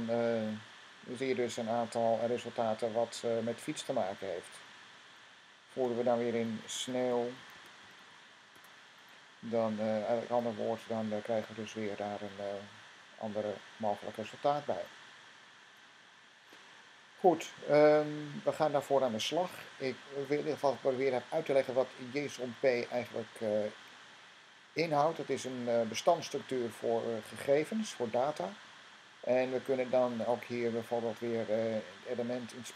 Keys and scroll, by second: 6.4-8.4 typing.